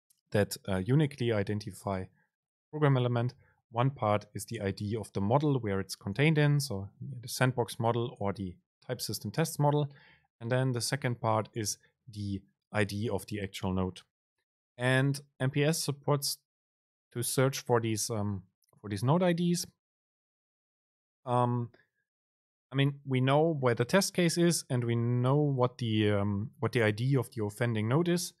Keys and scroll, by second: 15.0 super+c.